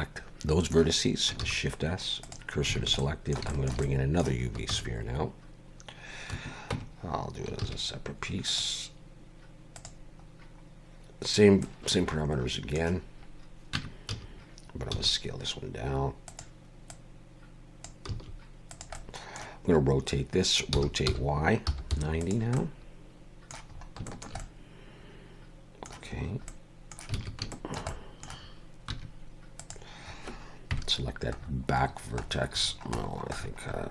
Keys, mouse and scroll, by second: 1.4 shift+s, 2.8 alt+a, 3.0 middle click, 3.5 shift+middle click, 3.8 middle click, 4.7 shift+a, 6.7 Tab, 7.6 shift+a, 10.3 scroll down 2, 11.6 middle click, 13.7 Tab, 14.1 a, 14.9 s, 16.9 click, 18.1 s, 18.9 middle click, 20.7 r, 22.6 middle click, 23.8 scroll up 1, 24.1 shift+middle click, 24.4 middle click, 26.2 scroll up 2, 26.5 middle click, 27.1 alt+a, 27.5 shift+middle click, 27.9 middle click, 28.9 1, 29.6 click, 30.7 KP_Decimal, 31.4-33.9 scroll down 39.